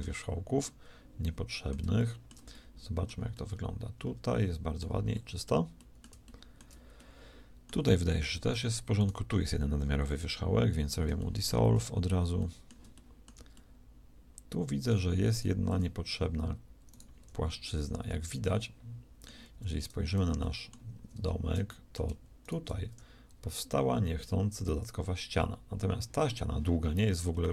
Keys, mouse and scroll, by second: 9.4 x, 17.0 g, 19.4 z, 22.8 shift+g.